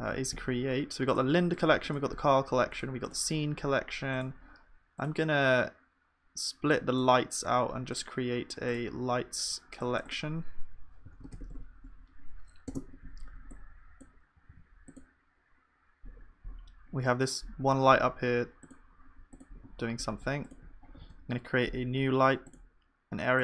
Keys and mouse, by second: 1.6-14.5 drag, 14.5 ctrl+s, 17.9-21.0 middle drag, 21.0 shift+a.